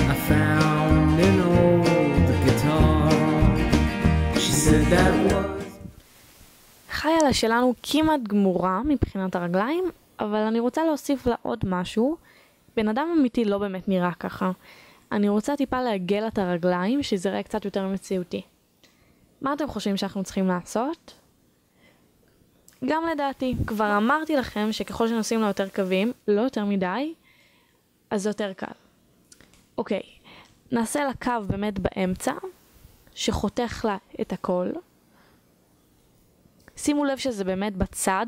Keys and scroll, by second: 0.0 a, 0.7 ctrl+z, 1.2 ctrl+z, 4.8 1.